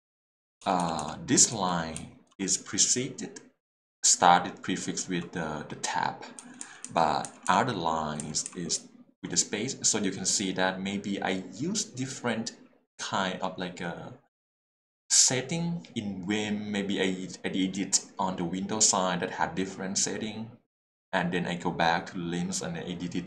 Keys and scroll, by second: 1.5 l, 2.0 h, 6.4 l, 6.6 k, 8.7 j.